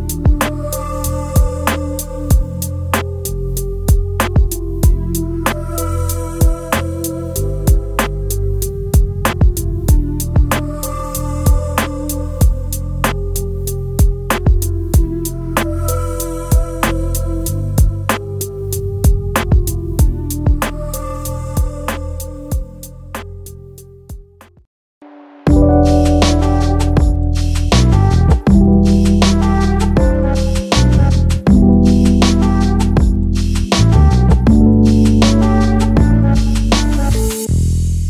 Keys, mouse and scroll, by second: 9.2-10.2 space, 10.7 alt+scroll up 1, 11.3 alt+scroll up 1, 11.7-13.2 space, 13.6 alt+scroll down 1, 13.9 space, 14.5-15.4 space, 24.8 double click.